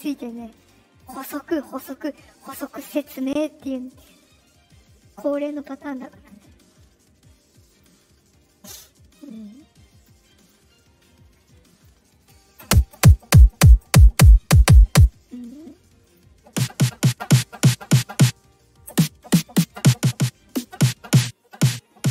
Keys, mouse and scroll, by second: 0.5 click, 2.5 click, 3.8 click, 4.4-5.5 drag, 7.6 click, 8.4-9.1 drag, 9.8 click, 10.3 click, 11.6 click, 15.9 click.